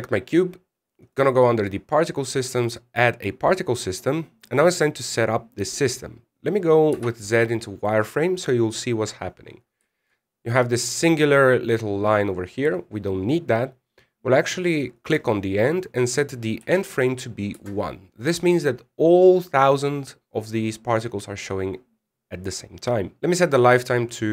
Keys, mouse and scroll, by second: 1.8 click, 3.3 click, 7.7 z, 10.6 shift+scroll up 1, 10.7 shift+middle click, 12.3-13.7 scroll up 1.